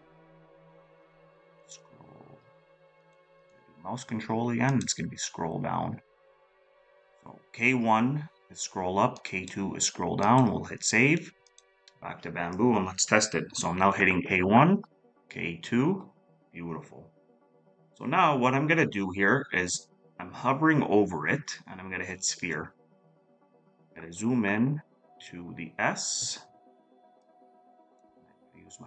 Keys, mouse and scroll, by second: 13.5-14.4 scroll up 1, 14.4 scroll down 1, 23.6-24.2 scroll up 1.